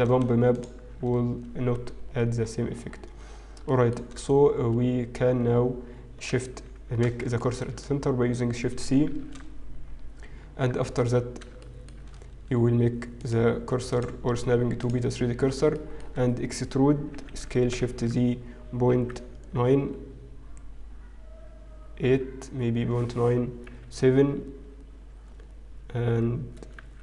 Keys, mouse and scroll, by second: 0.1 shift+middle click, 0.5 alt+shift+click, 2.9-3.7 scroll down 6, 3.7 shift+middle click, 7.3 shift+middle click, 7.9-8.3 scroll down 3, 8.5-9.5 scroll down 3, 9.5 shift+c, 10.7-12.5 scroll up 1, 12.5 shift+middle click, 12.5-13.6 scroll up 5, 14.7 click, 15.7 shift+middle click, 15.7-16.1 scroll up 1, 18.7 e.